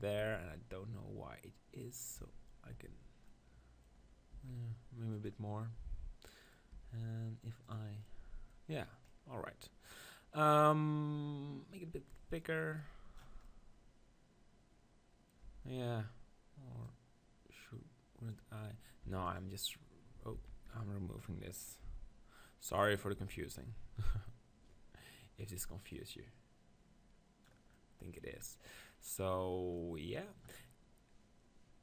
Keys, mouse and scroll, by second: 0.2 Tab, 1.8-3.6 drag, 2.2 Tab, 2.7 Tab, 3.6 middle click, 4.3 s, 5.3-9.3 drag, 6.7 Tab, 8.1-10.3 middle drag, 12.0-13.6 drag, 15.5 Tab, 16.8-18.6 drag, 19.1 x, 20.3 ctrl+z, 21.8 x, 23.2 Tab, 26.0-27.7 drag, 27.7-31.8 middle drag.